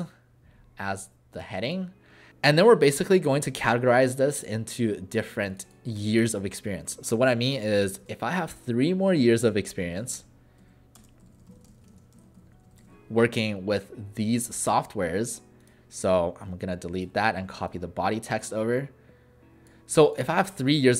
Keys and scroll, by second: 0.0-0.2 typing, 6.8 ctrl+a, 7.7 3, 8.0 shift+=, 9.4-13.2 typing, 16.5 Delete, 20.7 ctrl+alt+a.